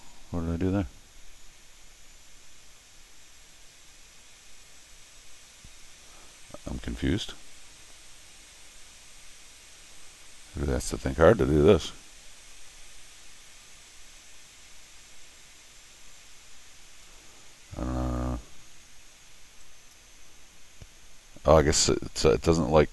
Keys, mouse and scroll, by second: 19.6 click.